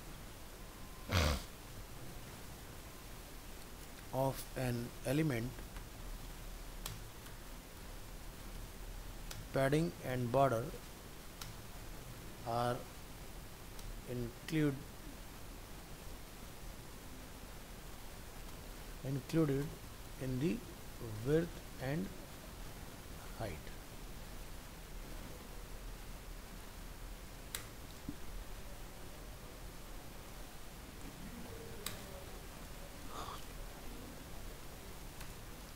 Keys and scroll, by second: 24.7 ctrl+s, 32.7 ctrl+s.